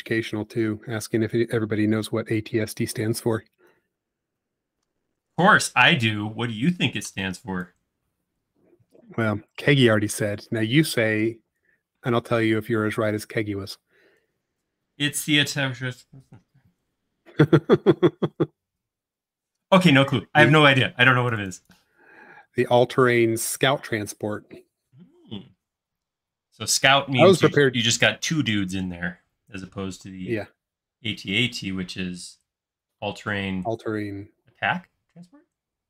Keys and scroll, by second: 0.8 typing, 7.3 p, 20.7 space.